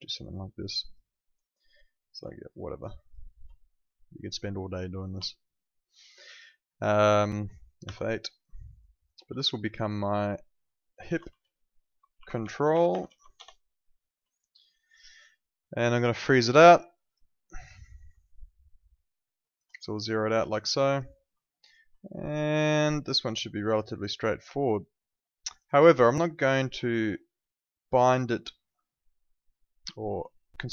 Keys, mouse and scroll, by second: 2.3 ctrl+shift+click, 4.3 click, 5.2 alt+click, 7.2 alt+click, 7.8 F8, 8.6 alt+click, 8.8 alt+right click, 9.8 click, 10.8-13.5 typing, 14.3 alt+click, 17.8 alt+middle click, 18.2 alt+click, 20.7 alt+click, 21.4 alt+click, 22.0 alt+middle click, 22.2 alt+right click, 22.5 alt+click, 25.9 alt+middle click, 26.1 alt+click.